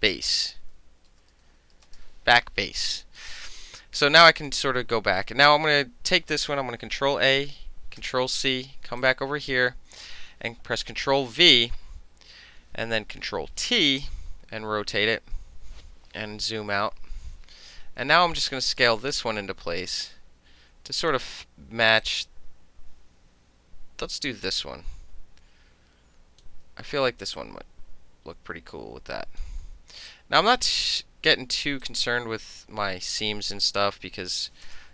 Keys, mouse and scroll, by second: 0.4-2.3 typing, 4.4 click, 7.0 ctrl+a, 8.0 ctrl+c, 9.0 click, 11.2 ctrl+v, 13.4 ctrl+t, 14.1-15.2 drag, 16.7 ctrl+-, 17.1 ctrl+-, 18.9-21.1 drag, 22.1-26.5 drag, 27.4-29.4 drag, 30.1 click, 31.9-33.8 drag, 34.7 KP_Enter.